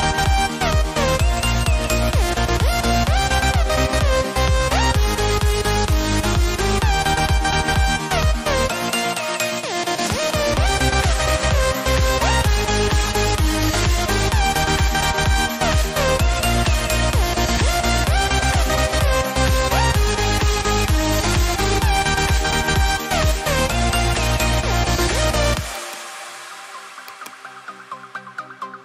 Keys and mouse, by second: 2.9 click, 5.7 click, 15.6 click, 22.9 click, 25.7 click.